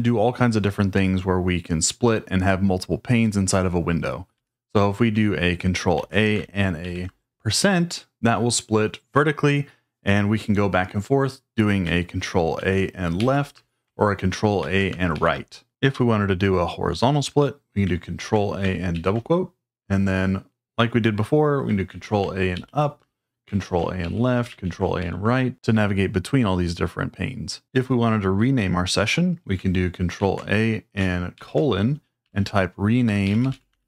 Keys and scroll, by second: 4.3 q, 5.9 ctrl+a, 6.8 shift+5, 12.6 ctrl+a, 13.2 Left, 14.6 ctrl+a, 15.1 Right, 18.2 ctrl+a, 18.9 shift+', 21.9 ctrl+a, 22.5 Up, 23.6 ctrl+a, 24.0 Left, 24.7 ctrl+a, 25.0 Right, 30.2 ctrl+a, 31.3-33.8 typing.